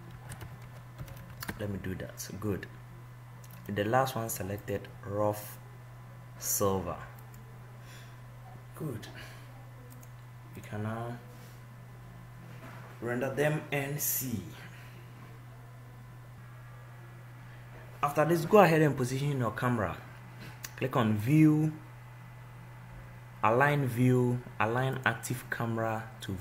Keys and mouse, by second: 2.4-4.8 middle drag.